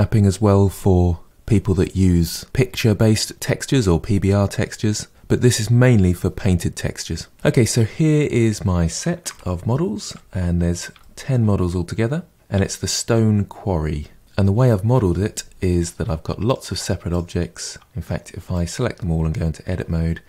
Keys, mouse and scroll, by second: 7.3 middle click, 8.0-8.8 scroll down 4, 8.8-9.2 scroll down 1, 9.2-10.2 shift+middle drag, 10.2-11.0 scroll down 1, 11.0-11.4 shift+middle drag, 11.4-12.3 scroll down 1, 12.3 scroll up 2, 12.6-13.2 shift+middle drag, 13.2-14.0 scroll up 4, 14.0 shift+middle drag, 15.8-16.1 drag, 16.4-19.0 drag, 19.7 Tab.